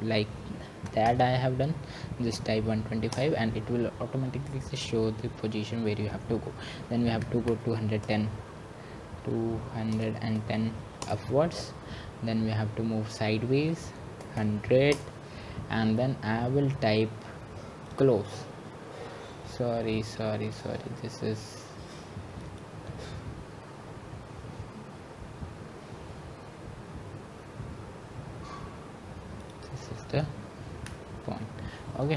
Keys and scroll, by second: 3.3-4.1 typing, 7.6 Return, 10.1-11.4 typing, 13.1-13.9 typing, 14.1 Return, 15.1-15.9 typing.